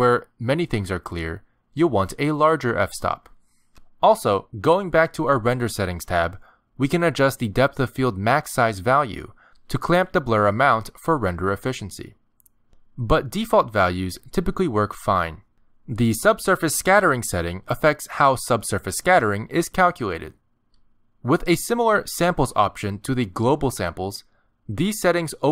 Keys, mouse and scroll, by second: 5.2 click, 8.0 click, 9.3 click, 13.5 click, 13.8 KP_0, 15.0 click, 15.4 click, 15.6 click, 17.6 click.